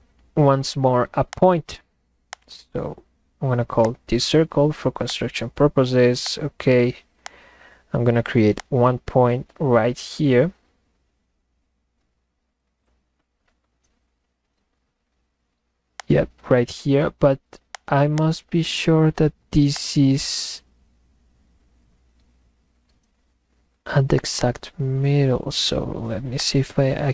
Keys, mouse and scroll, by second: 0.2 middle click, 1.3 click, 2.3 click, 3.8 click, 5.1 click, 6.2 click, 7.2 click, 8.6 click, 13.2 middle click, 16.0 click, 17.7 click, 18.1 click, 19.7-24.1 drag, 24.4 click, 26.4 click.